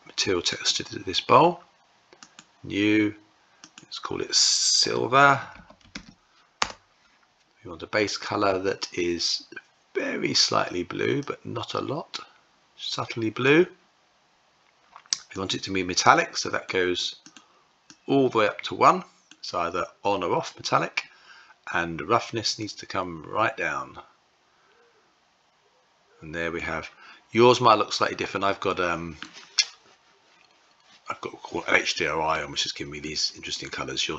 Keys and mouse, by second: 1.9 click, 3.4-6.9 drag, 7.7 click, 15.0-16.9 drag, 17.5-19.5 drag, 22.2-26.2 drag, 28.1 middle click, 32.6-34.1 middle drag.